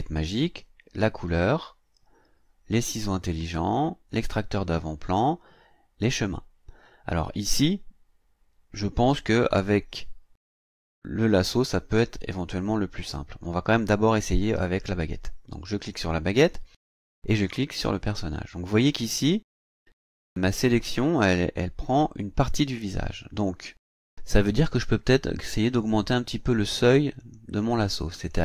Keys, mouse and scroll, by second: 15.8 click, 17.4 click, 27.2 click, 27.8 click, 28.3 click.